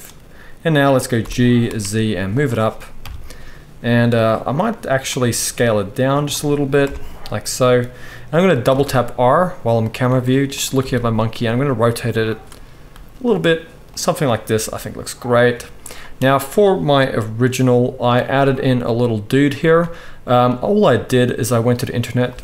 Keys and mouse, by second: 1.2 g, 3.0 KP_3, 4.2 click, 5.0 click, 5.4 s, 6.8 KP_0, 8.7 r, 10.1 r, 10.8 r, 12.9 r, 14.6 g.